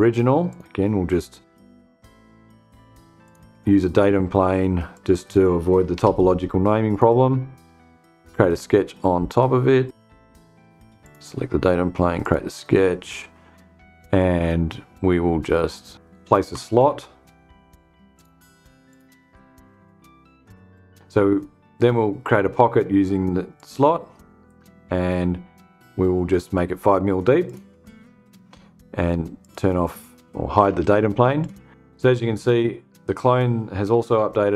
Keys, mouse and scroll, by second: 2.7 click, 4.4-5.0 drag, 5.4 BackSpace, 6.4 click, 10.5 click, 11.7 click, 17.6 click, 18.3 click, 19.8 click, 23.0 click, 26.9 click, 28.9 click, 30.2 space, 30.9 click.